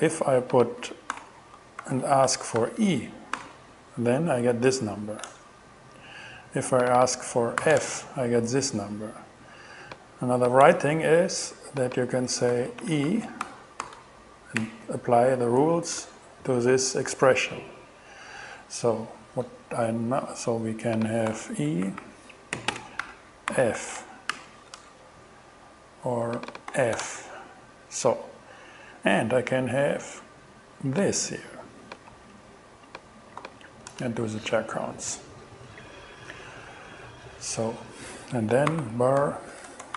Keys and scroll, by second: 1.1 alt+5, 1.8 alt+shift+2, 2.3 shift+e, 2.6 shift+2, 3.4 alt+shift+6, 3.9 alt+6, 5.3 shift+Return, 7.6 f, 7.8 shift+Return, 10.7 BackSpace, 12.3-14.6 typing, 16.0 shift+Return, 21.3 alt+8, 21.7 alt+Right, 22.3-24.3 typing, 24.3 alt+shift+9, 24.8 alt+shift+Return, 25.6 shift+Return, 26.7 shift+f, 27.0 shift+Return, 32.1 super+c, 33.4 super+v, 33.9 shift+super+Return, 34.7 shift+Return, 38.5-39.9 typing.